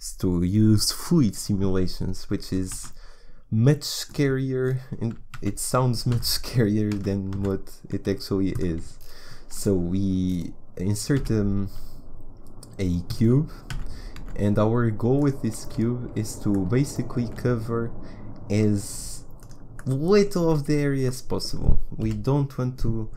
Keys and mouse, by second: 2.7 shift+a, 5.3 z, 6.1 g, 11.1 s, 13.7 g, 15.6 z, 17.2 s, 19.8-21.2 drag, 20.4 z, 22.0 KP_1.